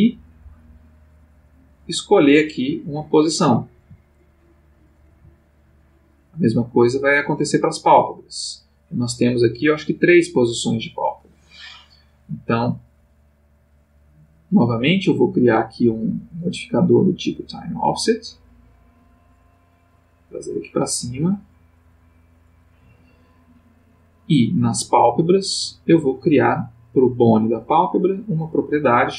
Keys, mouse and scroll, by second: 3.8 g, 4.7 click, 5.1 g, 5.7 click, 6.6 click, 8.2 click, 9.8-12.4 drag, 16.4 click, 17.8 click, 19.5-20.7 drag, 21.1 right click, 22.5 click, 25.2 click, 27.0 click, 27.7 click, 28.7 click.